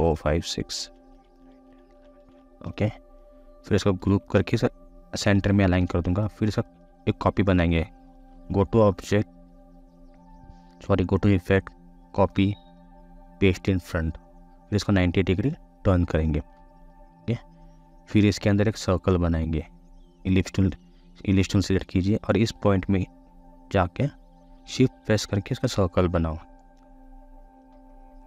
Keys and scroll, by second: 4.1 ctrl+g.